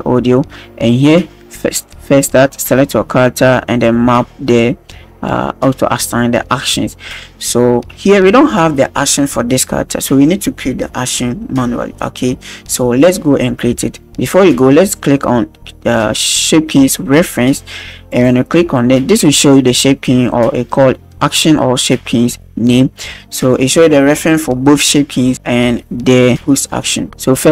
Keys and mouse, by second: 13.9-14.4 shift+drag, 18.1 click.